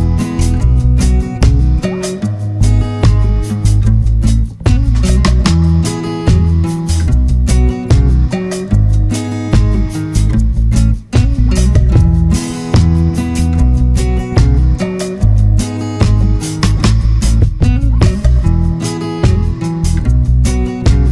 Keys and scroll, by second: 4.9 ctrl+z.